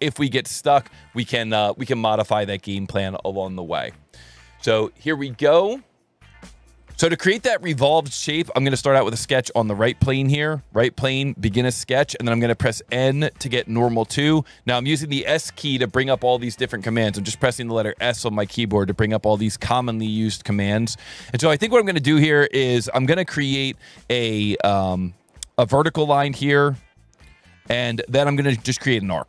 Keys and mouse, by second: 5.6 click, 6.8 click, 9.0 click, 9.2 s, 10.0 click, 10.5 n, 11.8 n, 13.7 s, 16.1 s, 21.4 click, 25.6 click, 27.3 click, 27.7 Escape, 28.1 s, 28.9 click.